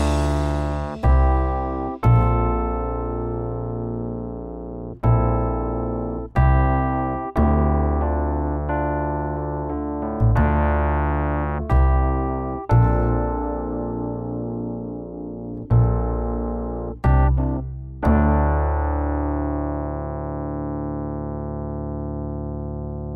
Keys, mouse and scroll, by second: 0.2 right click, 0.6 r, 3.0 right click, 3.5 r, 5.5 s, 7.1 Tab, 7.3-7.7 scroll down 1, 7.7 shift+middle click, 9.0 right click, 9.5 s.